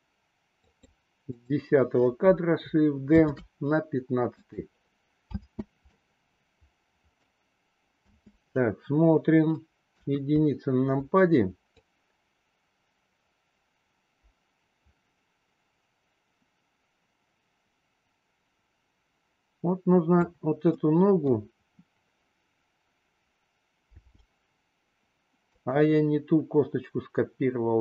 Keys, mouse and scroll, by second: 0.6 click, 1.3 click, 3.2 shift+d, 5.3 space, 6.0-7.2 middle drag, 8.1 space, 9.8 KP_1, 11.7-20.2 drag, 20.6-21.3 middle drag, 23.8 g.